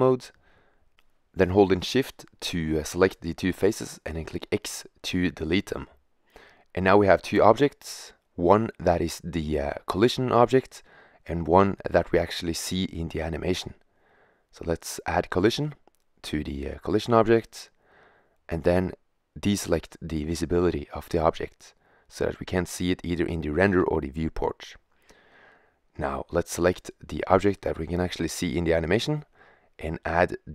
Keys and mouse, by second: 1.0-3.1 right drag, 3.1 x, 5.6-7.7 middle drag, 11.3 g, 14.9-16.4 drag, 22.8 click, 25.6-27.5 drag, 30.1 middle click.